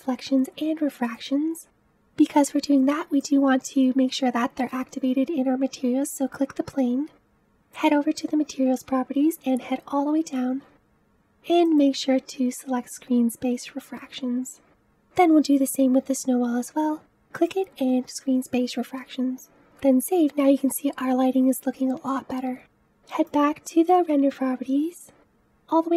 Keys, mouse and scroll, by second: 1.1 click, 3.4 click, 11.7 click, 16.9 click, 19.2 click, 19.7 scroll up 3, 22.7-23.2 scroll down 1.